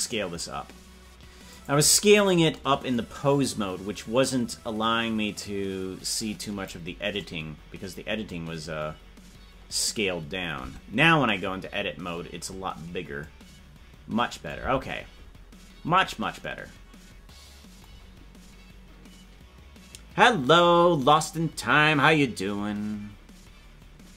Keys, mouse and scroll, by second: 3.9-6.7 drag, 10.6 Tab, 12.9 scroll up 2, 15.4 Tab.